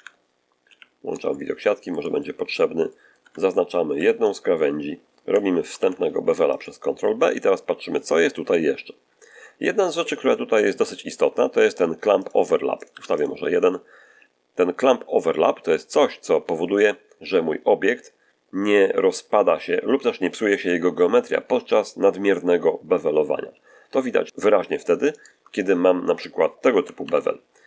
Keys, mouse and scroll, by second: 0.5 z, 1.1-2.0 shift+middle drag, 2.1-2.5 shift+middle drag, 2.7-3.2 shift+middle drag, 3.1 Tab, 3.8 shift+2, 4.1 shift+right click, 4.8 shift+middle click, 5.5 ctrl+b, 6.4 ctrl+click, 12.1 click, 12.7 click, 12.8 1, 13.1 click, 23.4 ctrl+z, 25.0 shift+right click, 26.9 ctrl+b.